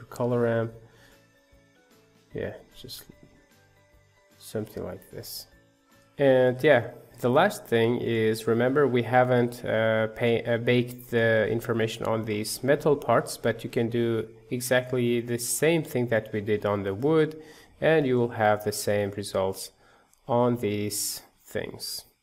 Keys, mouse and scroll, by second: 0.0 shift+a, 1.1-4.2 drag, 4.9 middle click, 5.6 scroll down 1, 5.8 middle click, 6.6-6.9 scroll down 2, 6.9-14.3 shift+middle drag, 14.3 scroll down 5, 14.8 shift+middle click, 15.2 scroll down 2, 15.5-16.6 shift+middle drag, 16.6-17.0 scroll down 1, 17.0-18.1 middle drag, 18.1-19.5 scroll up 3, 19.5-22.2 middle drag.